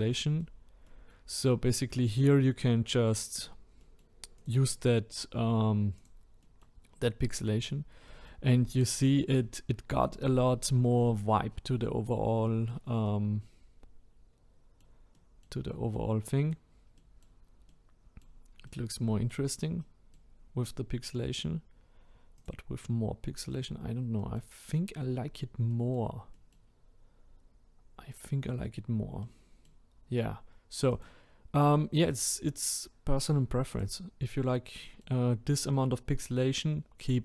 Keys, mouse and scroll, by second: 4.5 click, 4.7-6.0 middle drag, 6.0-6.5 drag, 6.5-7.5 middle drag, 7.5-8.0 scroll down 2, 8.0-23.6 middle drag, 23.6 click, 24.2-24.8 middle drag, 24.8-25.2 scroll up 2, 25.2-25.7 scroll down 1, 25.7-26.7 middle drag, 26.7-29.2 scroll up 1, 29.2-33.8 middle drag, 33.8 click, 34.8-37.2 middle drag.